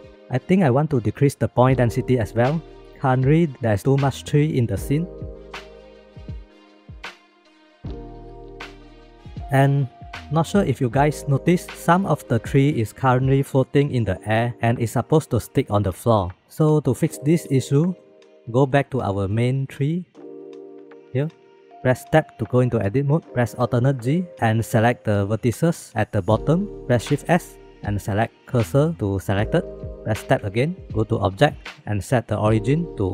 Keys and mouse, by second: 6.0 click, 6.2 click, 6.7 click, 7.0 click, 7.9 click, 8.3 KP_1, 10.4 shift+middle click, 11.6 shift+middle click, 17.2-17.5 middle drag, 17.7 shift+middle click, 18.7-19.3 middle drag, 19.8 shift+middle click, 21.4 shift+middle drag, 22.7 Tab, 24.2 alt+z, 25.9 1, 27.1 shift+s, 30.4 Tab, 31.1-31.9 right drag.